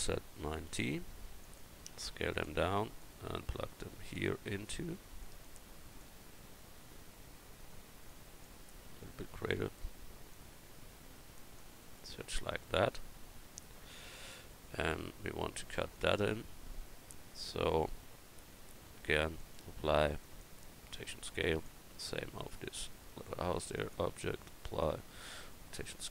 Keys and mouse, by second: 1.9 s, 4.9 click, 8.8 s, 12.3-12.8 middle drag.